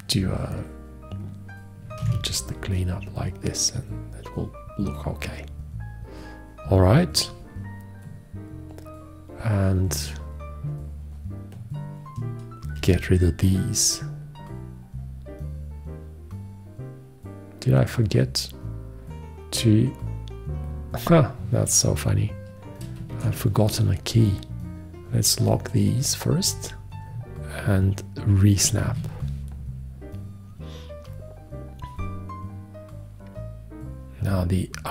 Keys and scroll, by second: 2.2 alt+q, 13.0 shift+x, 23.4 shift+1, 29.1 ctrl+`.